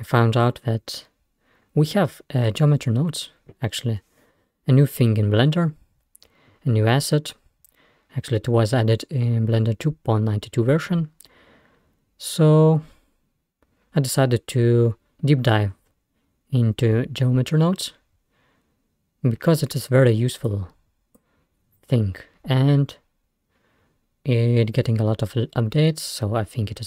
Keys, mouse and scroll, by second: 20.5-22.6 drag, 22.6 scroll down 1.